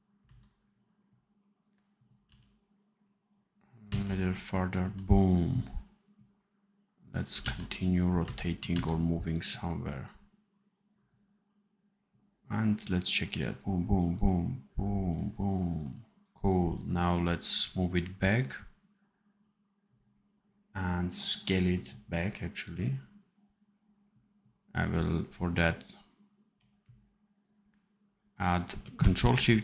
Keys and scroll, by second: 0.1 c, 2.2 v, 3.8 c, 4.7 v, 7.3 v, 8.1 c, 8.6 v, 26.4 r.